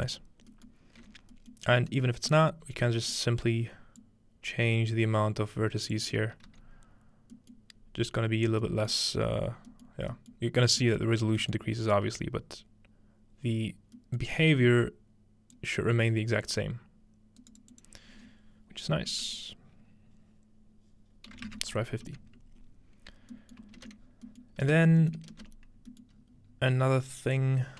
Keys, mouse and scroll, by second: 0.7 scroll down 2, 1.7-2.1 scroll down 1, 2.1-6.0 scroll up 4, 4.0-6.0 drag, 6.5 z, 7.4-8.6 middle drag, 7.8-8.4 scroll up 2, 8.4 scroll down 2, 8.9-9.7 middle drag, 9.9 middle click, 10.4-10.8 middle drag, 12.3-13.5 middle drag, 14.5-15.5 middle drag, 15.5-17.7 drag, 17.4 right click, 22.8-25.4 scroll down 1, 23.4 middle click, 26.1-27.4 middle drag, 26.1-26.8 scroll up 1, 26.8 scroll down 1, 27.4-27.7 drag.